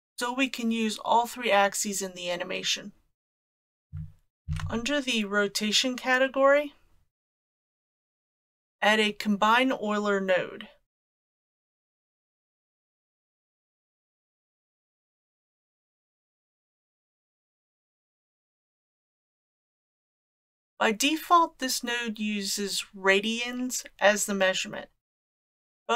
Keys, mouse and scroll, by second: 3.6 click, 4.5 shift+a.